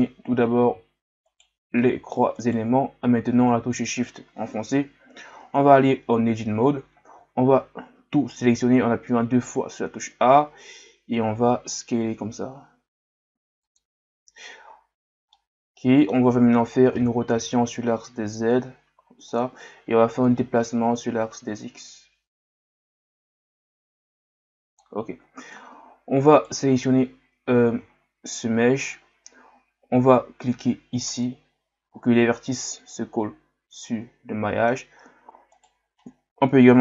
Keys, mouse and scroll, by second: 1.3 shift+right click, 1.8 middle click, 2.4 shift+right click, 3.7-4.7 scroll down 1, 4.7 KP_1, 5.4 Tab, 6.0-7.1 scroll up 2, 7.1 a, 9.7-10.0 scroll up 1, 11.2 s, 14.9-15.3 scroll down 1, 15.3-17.0 middle drag, 17.0 r, 20.3-23.4 drag, 25.7-26.3 scroll up 2, 26.3 right click, 27.4-27.9 scroll up 2, 27.9-28.7 scroll down 1, 28.7-31.1 scroll down 1, 31.1 click, 32.6-35.5 middle drag, 35.5 right click.